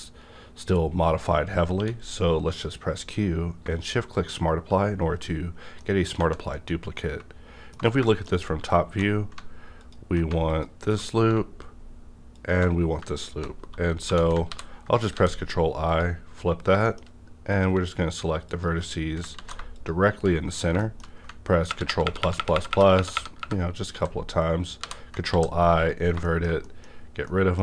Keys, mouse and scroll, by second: 1.8 q, 4.1 shift+click, 4.1 q, 5.4 scroll down 1, 5.8 middle click, 6.2 Tab, 6.5 scroll down 1, 6.5-8.0 middle drag, 8.0 shift+middle click, 8.3 scroll up 1, 8.8 2, 9.8 alt+click, 10.5 alt+click, 12.4 alt+shift+click, 14.0 alt+shift+click, 14.4 ctrl+i, 15.1 x, 15.8 click, 16.3-16.8 scroll up 2, 16.8 middle click, 17.5 click, 18.5 shift+click, 19.3 ctrl+z, 20.4 scroll down 1, 20.8 middle click, 21.0 scroll down 1, 21.1 middle click, 21.5 ctrl+KP_Add, 23.9 ctrl+z, 24.8 ctrl+i, 25.3 x, 25.8 click, 26.2 shift+middle click, 27.0 scroll up 1, 27.2 middle click.